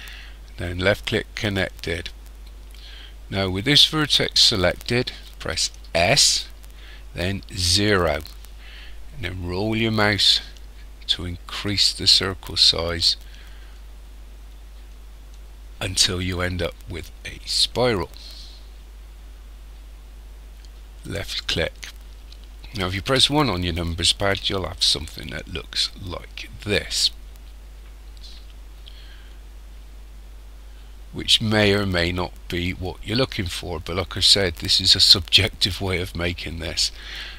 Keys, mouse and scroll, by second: 5.8 s, 23.0 KP_1, 24.8 shift+middle click.